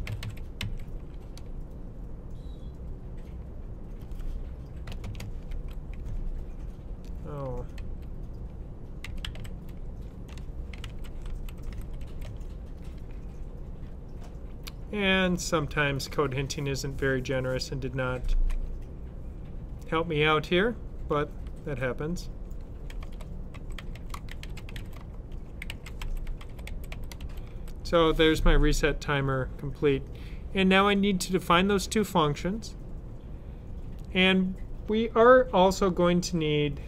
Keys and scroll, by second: 0.0-1.0 typing, 5.1 typing, 7.7 typing, 8.7-12.6 typing, 21.0 typing, 22.5-27.9 typing.